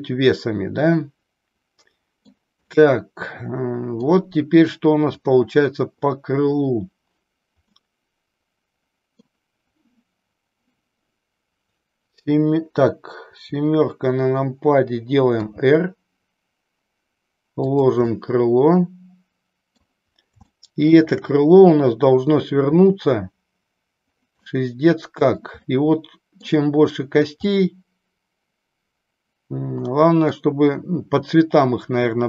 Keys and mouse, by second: 2.7-4.1 middle drag, 5.0 click, 7.7-9.2 middle drag, 13.4 KP_7, 15.5 r, 18.2-19.9 middle drag, 20.6 shift+middle click, 24.6 middle click, 25.7 middle click, 27.5-30.5 middle drag.